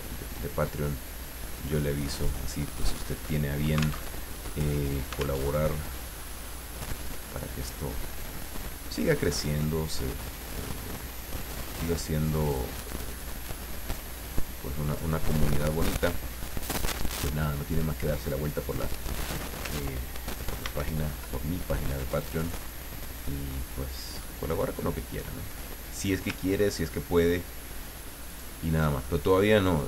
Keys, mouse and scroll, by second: 1.6 click, 4.0 alt+Tab, 5.4 alt+Tab, 7.1-10.9 drag, 11.9 click, 13.7-15.2 drag, 19.0 click, 20.6 ctrl+d, 22.4 click, 23.3-26.3 drag, 26.6-27.0 ctrl+scroll up 1, 28.3 click.